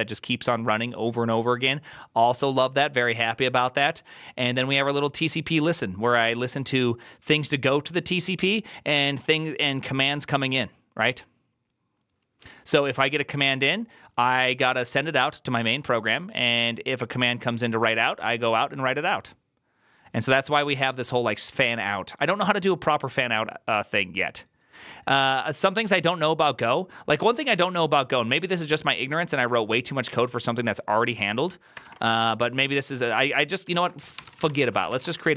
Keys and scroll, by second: 27.3 alt++, 33.6 alt+{, 34.1-35.3 typing.